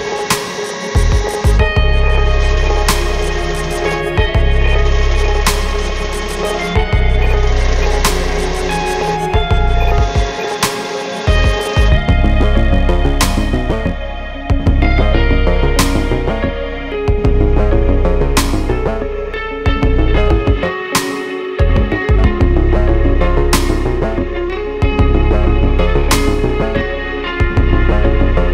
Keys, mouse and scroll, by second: 4.9 click, 7.3 click, 28.0 right click.